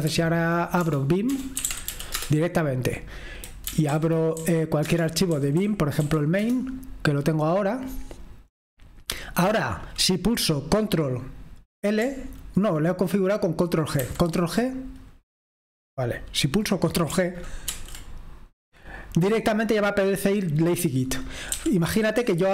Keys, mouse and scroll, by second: 0.0-2.3 typing, 3.6 Down, 3.9 Down, 4.3-6.9 typing, 4.8 Return, 14.0 ctrl+h, 18.1 ctrl+g, 21.7-22.5 typing.